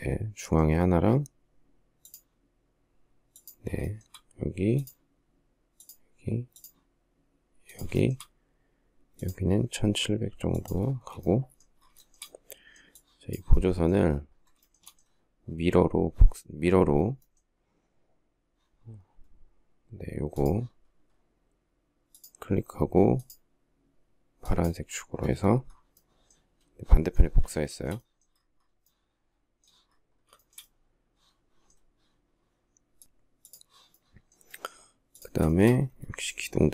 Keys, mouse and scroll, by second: 3.6 shift+middle click, 7.7 shift+middle click, 10.7 space, 11.8 shift+middle click, 14.5 shift+middle click, 27.5 shift+middle click, 30.1 shift+middle click, 34.8 shift+middle click, 36.1 m.